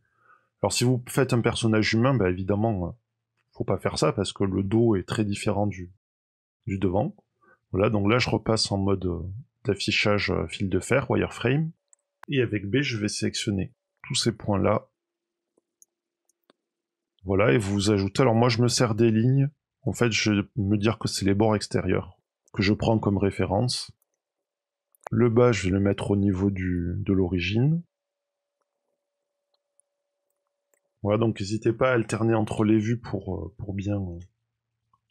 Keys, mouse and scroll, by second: 5.2 KP_3, 7.7 click, 8.3-10.7 scroll up 2, 11.4-12.7 scroll down 2, 12.9 b, 14.3 click, 15.4-15.7 scroll up 3, 15.8 shift+middle click, 16.4-16.8 scroll up 3, 16.9-18.3 scroll down 1, 18.3 click, 18.3 scroll down 3, 20.0-21.3 scroll up 4, 22.0-22.3 scroll down 3, 23.1 shift+middle click, 23.6 shift+middle click, 24.0 alt+a, 24.3 b, 24.6 click, 24.8-26.7 scroll up 7, 24.9 shift+middle click, 26.7 click, 26.7-27.2 scroll up 1, 28.3 scroll down 7, 28.6 shift+middle click, 28.8 alt+a, 29.1 b, 29.7 click, 30.2 scroll down 4, 30.3 middle click, 30.7 KP_1, 30.9 scroll down 1, 32.0 shift+middle click, 32.5 a, 34.0 alt+a, 34.9 b.